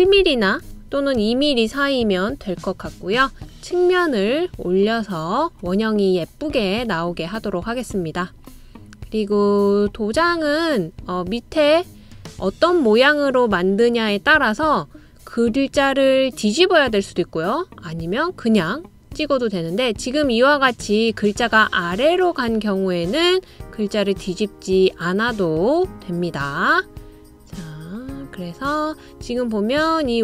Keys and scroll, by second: 1.0 1, 1.6 Return.